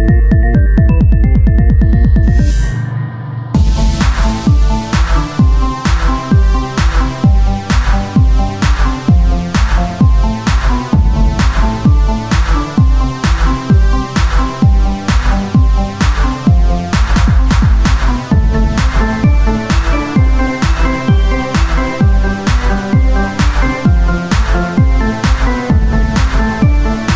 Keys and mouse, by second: 1.3 z, 2.3 x, 3.9 ctrl+Tab, 4.4-6.5 right drag, 6.5 w, 8.3 z, 9.1 ctrl+z, 9.9 z, 10.8 e, 13.3 w, 15.1 ctrl+z, 15.4 Tab, 15.9 ctrl+z, 16.5 Tab, 17.2 ctrl+a, 17.9 Tab, 19.2 s, 20.6 w, 23.9-25.1 right drag, 24.9-27.1 drag, 26.6 z.